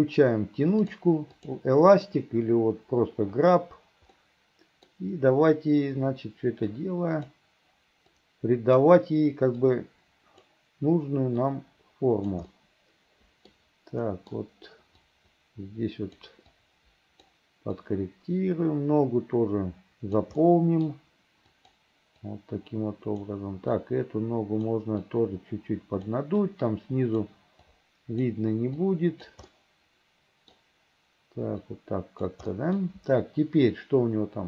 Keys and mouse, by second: 0.9 click, 1.5 click, 4.2 click, 6.8 click, 8.2 click, 9.7 click, 11.5 click, 12.6 click, 13.5 click, 14.1 middle click, 15.1-16.3 drag, 16.6 click, 17.9-20.3 drag, 20.5 middle click, 21.6 click, 22.4 click, 23.8 click, 25.1-26.2 right drag, 26.6 right click, 27.8 right click, 28.9 right click, 29.6-30.6 middle drag, 31.8 right click, 32.6 middle click.